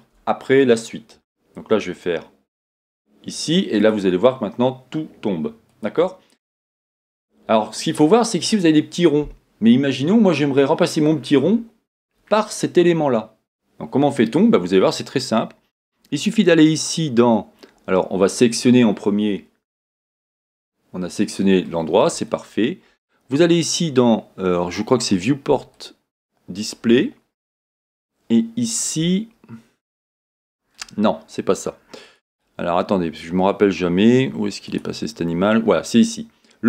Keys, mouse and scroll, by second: 0.0-0.4 shift+scroll up 1, 0.4-2.8 scroll down 1, 2.8 click, 3.9-6.5 drag, 6.5 scroll up 1, 11.1 scroll down 1, 18.5-18.9 scroll down 1, 20.4 middle click, 23.0-24.5 middle drag, 25.7 click, 27.1 click, 30.0-32.6 drag, 34.7 click.